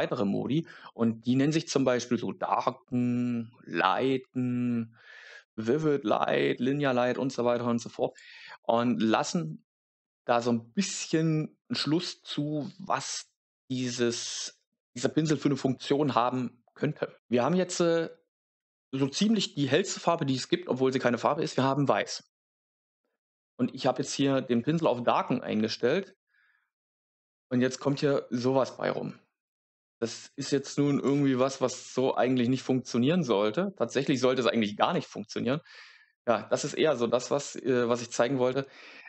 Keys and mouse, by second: 33.9 click.